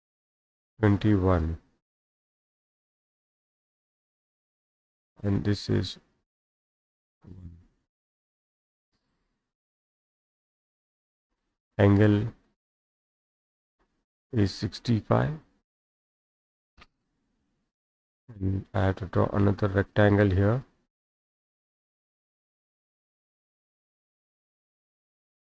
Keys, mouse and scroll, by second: 0.2 click, 1.0-2.0 typing, 3.5 middle click, 3.8-4.7 scroll up 3, 4.9 click, 6.2 click, 7.1 click, 7.9 1, 8.1 Return, 10.5-12.0 middle drag, 10.5-11.1 scroll down 5, 11.1-12.0 scroll, 12.5 click, 14.1 click, 15.1-16.1 typing, 17.1-20.0 scroll down 10, 20.0 click, 21.7 click, 22.7 click, 25.0 click.